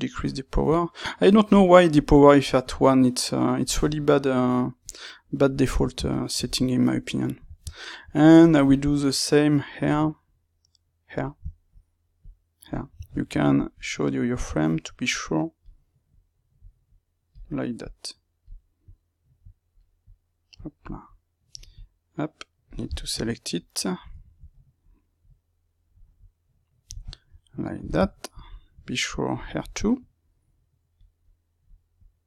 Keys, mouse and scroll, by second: 0.1 click, 0.6-5.6 drag, 5.6-9.0 middle drag, 9.0-11.5 drag, 11.5 shift+middle click, 12.1 click, 13.0-14.2 alt+right drag, 14.2-22.8 drag, 22.8-25.2 shift+middle drag, 25.2-27.0 drag, 27.0-29.9 shift+middle drag, 29.9-31.2 drag, 31.2 middle click, 31.9-32.2 drag.